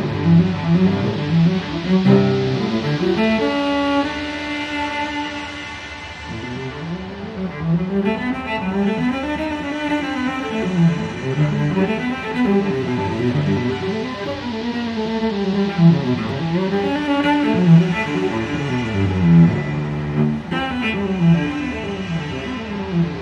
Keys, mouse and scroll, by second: 0.0 click, 1.5 scroll down 2, 2.0 scroll up 2, 4.2 click, 5.0 click, 6.5 click, 7.9-9.5 drag, 9.9 click, 20.1 click, 21.6 0.